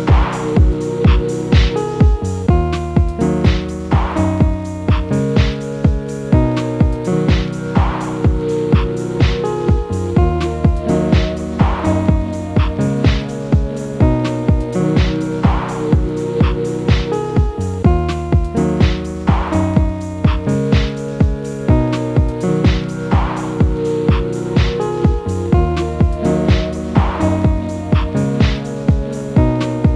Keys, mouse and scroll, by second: 0.1 click, 0.8 g, 2.6 click, 3.4 g, 4.8 g, 6.6-9.7 middle drag, 9.7-10.3 scroll down 1, 10.3 click, 10.7 shift+a, 11.6-12.1 scroll down 6, 12.1-12.6 middle drag, 12.6 s, 14.1-15.4 middle drag, 15.4 scroll down 1, 15.7 g, 17.7-18.1 middle drag, 18.1 Tab, 19.2 2, 20.4 click, 21.1 e, 23.2 click, 24.4 ctrl+b, 27.1-28.8 right drag, 28.8 g.